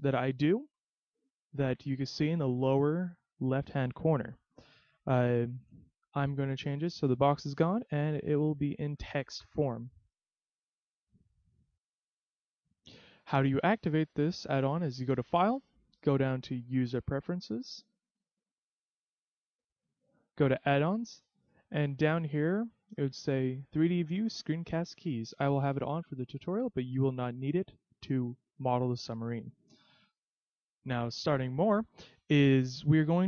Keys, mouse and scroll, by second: 4.7 middle click, 9.9 middle click, 9.9 scroll down 1, 10.5 middle click, 11.3 middle click, 14.5 click, 31.8 click.